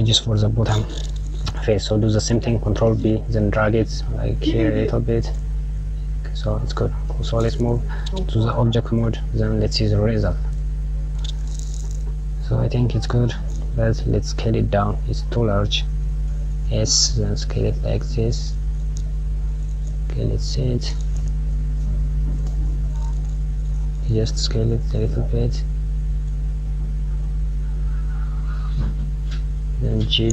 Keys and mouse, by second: 2.2 ctrl+b, 8.4 Tab, 9.6 click, 10.4 click, 14.0 click, 14.7 s, 19.3 click, 20.3 click, 22.8 click, 23.5 s.